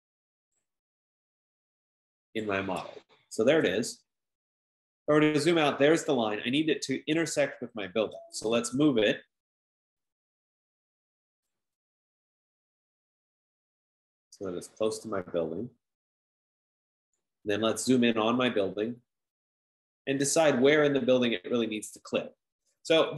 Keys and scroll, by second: 8.2-9.4 typing, 14.1 typing.